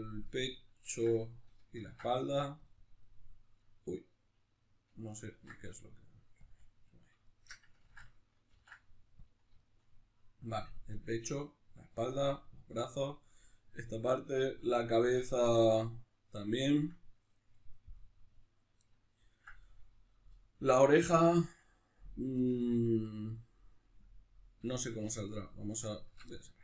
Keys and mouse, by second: 0.3-1.8 right drag, 1.8 ctrl+e, 3.7 right click, 5.3 ctrl+e, 7.3-25.3 shift+middle drag, 7.8 ctrl+z, 8.5 ctrl+e, 25.3 alt+right click, 26.3-26.6 middle drag.